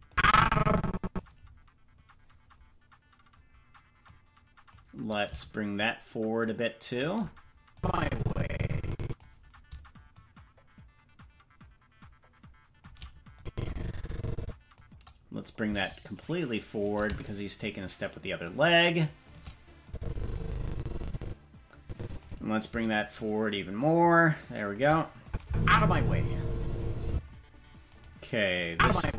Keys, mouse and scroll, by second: 0.1-1.2 drag, 4.0 click, 5.7-7.0 shift+drag, 7.7-9.2 drag, 10.1-12.8 shift+drag, 13.3-14.8 drag, 16.1 shift+click, 17.2-19.3 shift+drag, 19.8-22.2 drag, 23.1-24.8 shift+drag, 25.2 click, 25.4 space, 27.1 space, 28.0 right click, 28.7-29.1 drag.